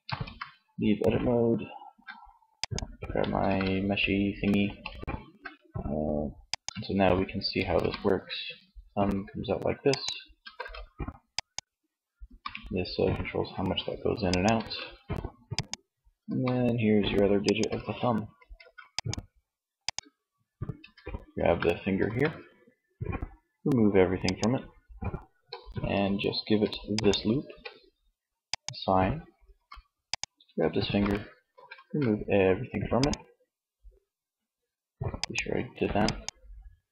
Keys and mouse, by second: 2.6 ctrl+Tab, 5.6 click, 7.0 r, 9.9 ctrl+z, 11.6 r, 14.0 ctrl+z, 15.4 r, 16.8-18.7 drag, 17.0 ctrl+z, 17.8 ctrl+s, 19.1 click, 20.0 Tab, 20.5 a, 21.5 a, 23.7-25.3 drag, 28.8 Tab, 30.2 Tab, 30.6 a, 31.1 a, 32.3 click, 34.8-36.9 drag.